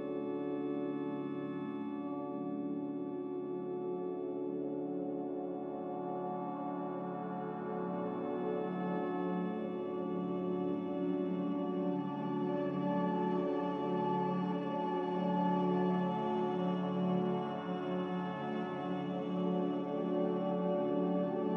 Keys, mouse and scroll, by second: 1.0 Escape, 1.7 Delete, 8.0 Escape.